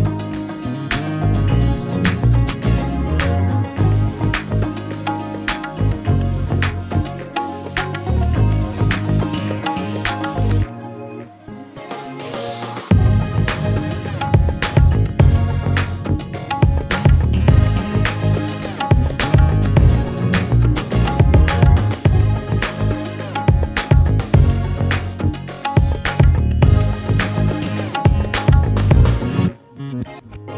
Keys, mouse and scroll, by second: 0.4 space, 1.5-3.8 drag, 3.8 KP_0, 4.3 BackSpace, 4.9 space, 5.6 click, 6.8-8.3 drag, 8.3 space, 8.6 click, 9.4 space, 9.9 click, 12.6 space, 15.2 click, 16.1 click, 21.0 KP_0, 22.0-28.1 drag, 25.3 KP_0, 28.3-30.5 drag.